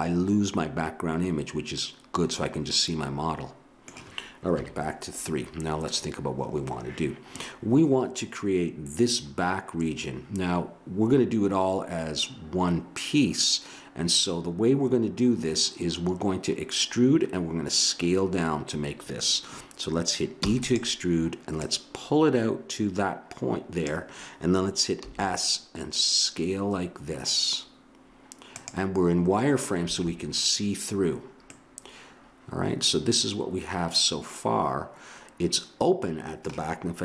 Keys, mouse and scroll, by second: 4.5 KP_3, 20.4 e, 21.5-23.2 drag, 25.0 s.